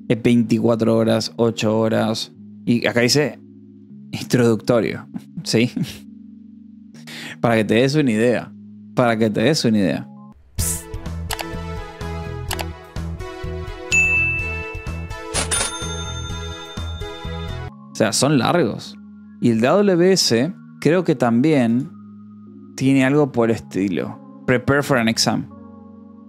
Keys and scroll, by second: 19.8-21.2 typing.